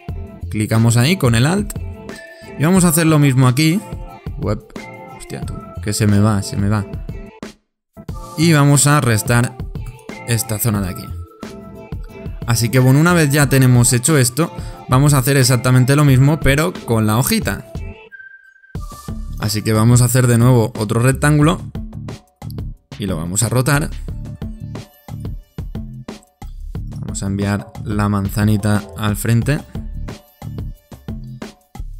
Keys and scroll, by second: 17.9 super+-.